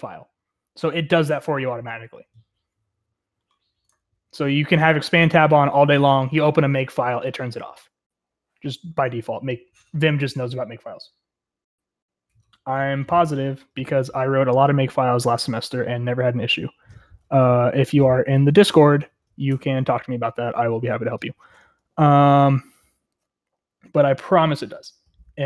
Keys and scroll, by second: 21.6-22.9 typing.